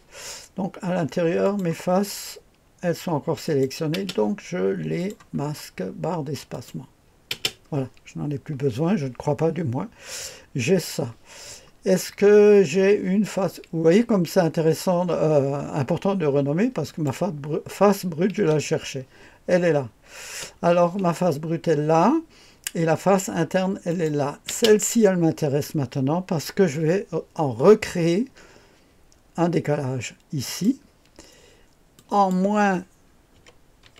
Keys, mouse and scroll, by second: 1.4 click, 1.8-2.5 scroll down 1, 3.4 click, 3.9 space, 5.0 click, 5.4-6.5 scroll down 1, 6.5 click, 7.3 space, 9.8-10.9 scroll up 1, 16.9 click, 18.4 space, 20.2 space, 23.9 click, 24.5 space, 30.4 click, 33.3 KP_Subtract, 33.8 KP_2.